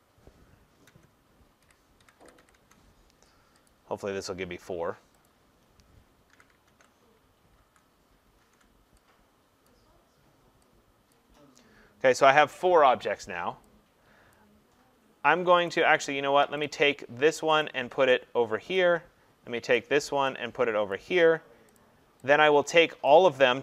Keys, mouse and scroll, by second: 1.4-2.4 typing, 2.6 Tab, 6.3 ctrl+c, 6.7 ctrl+v, 7.6 ctrl+v, 8.4 ctrl+v, 9.7 click, 11.1 click, 14.4 click, 15.7 click, 16.7 click, 17.6 click, 18.8 click, 19.8 click, 20.9 click, 21.8 click, 23.1 click.